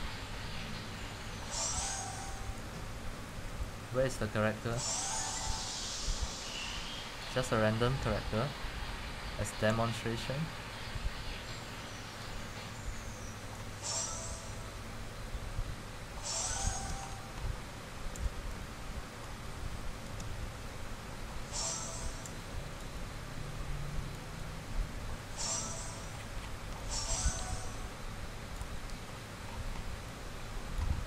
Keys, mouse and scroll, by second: 8.5 middle click, 13.7 click, 17.9 middle click, 18.4-18.7 scroll, 19.5 c, 19.6 click, 19.9 c, 20.4 click, 20.6 middle click, 22.1-22.4 scroll, 23.0-25.0 typing, 25.5 click, 25.6-26.9 middle drag, 25.6-26.2 scroll, 28.9 click, 29.2-29.6 middle click, 29.8 scroll, 31.0 click.